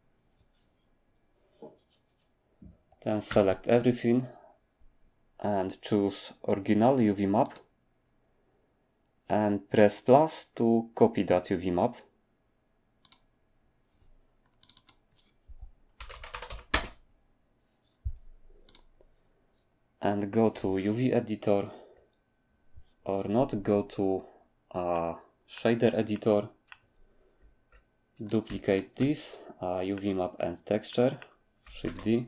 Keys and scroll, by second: 3.3 a, 16.0-16.5 typing, 16.7 Return, 31.8 d.